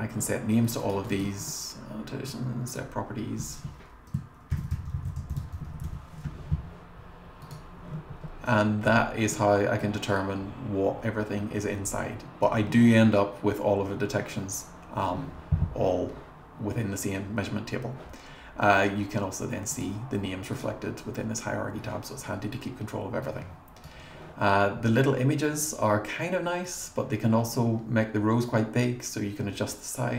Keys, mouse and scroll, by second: 0.7 click, 0.8 click, 1.1 right click, 2.7 click, 4.3-6.4 typing, 7.4 click, 8.2 scroll up 1, 8.9 scroll up 1, 9.8-12.4 drag, 19.8 click, 20.6 click, 26.6-30.1 drag.